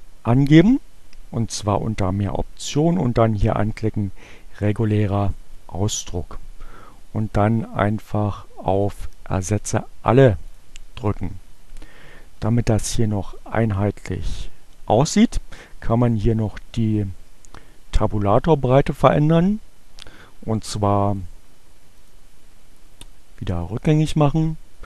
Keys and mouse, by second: 8.4-10.8 drag, 21.1 click, 22.0 click, 23.7 click.